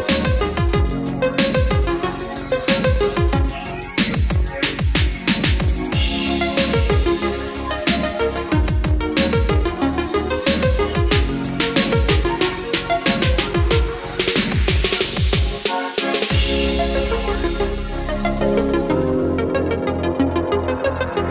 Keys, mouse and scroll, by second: 0.8-2.1 typing, 3.4-9.9 typing, 12.4 scroll down 1, 14.6-15.2 scroll up 1, 17.2-18.8 drag, 19.3 scroll down 1, 20.3-21.3 scroll up 1.